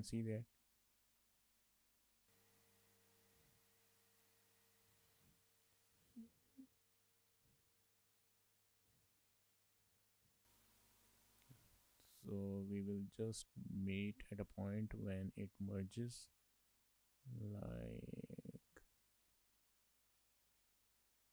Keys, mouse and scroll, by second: 0.6-1.0 scroll up 2, 1.0 shift+middle click, 1.5 middle click, 2.6 shift+middle click, 2.7 middle click, 3.3 click, 4.3 middle click, 6.1 scroll up 2, 6.2 shift+middle click, 6.3 middle click, 6.9 click, 9.2 shift+middle click, 9.4 scroll down 1, 9.6 middle click, 10.1 click.